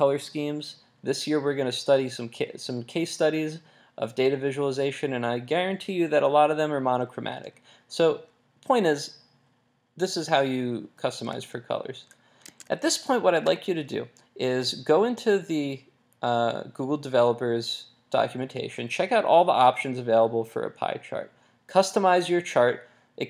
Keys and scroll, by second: 11.3 super+Tab.